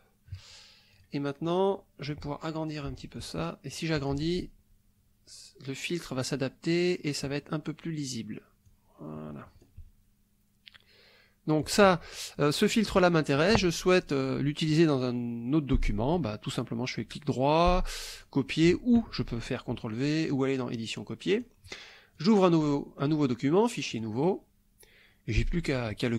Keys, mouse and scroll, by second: 1.0 click, 3.2-4.3 ctrl+drag, 8.7-9.8 drag, 11.5 click, 16.2 right click, 18.2 click, 20.2 click, 21.3 click, 22.2 click, 23.9 click.